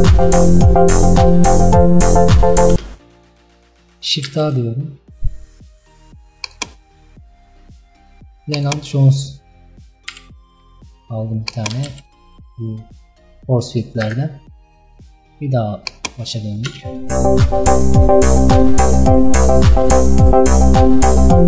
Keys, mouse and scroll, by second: 2.8 space, 16.0 click, 16.8 space.